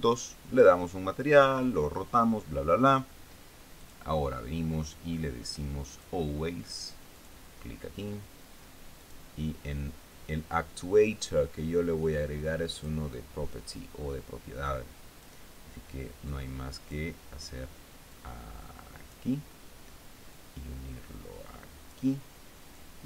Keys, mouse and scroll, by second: 4.2 click, 6.4 click, 7.6 click, 9.4 click, 13.2 click, 15.1 click, 16.7 click, 18.5-19.7 drag, 20.8-22.5 drag.